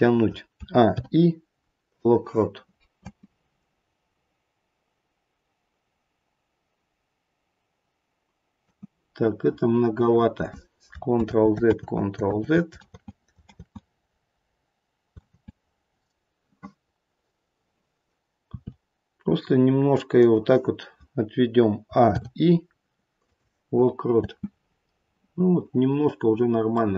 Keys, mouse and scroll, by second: 0.5 a, 0.8 i, 3.0 space, 8.7 space, 11.2 ctrl+z, 11.7 ctrl+z, 12.3 ctrl+z, 12.9 ctrl+z, 13.4 ctrl+z, 15.2 ctrl+z, 20.2 r, 21.8 a, 22.0 i, 24.1 space, 26.7 middle click.